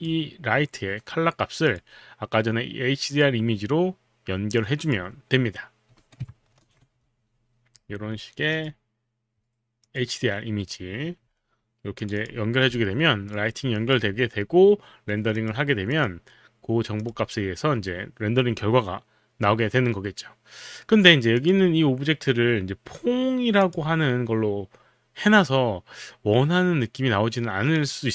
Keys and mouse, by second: 1.6 click, 3.2 click, 4.8 click, 6.5 ctrl+v, 7.0 Return, 8.5 click, 9.8 click, 12.0 click, 12.8 alt+click, 13.5 alt+right click, 14.4 alt+click, 15.3 click, 16.0 click, 21.3 click, 23.6 click, 27.8 click.